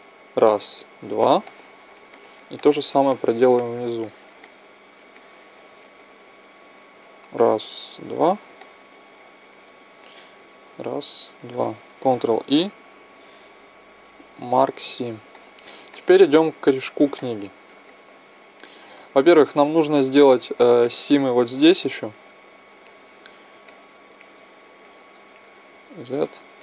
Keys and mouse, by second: 0.2-1.4 right drag, 9.4 middle click, 9.4 right click, 10.6-12.8 right drag, 12.3 ctrl+e, 20.3-24.1 middle drag, 24.6-25.8 middle drag, 25.8-26.6 right drag, 25.8 z.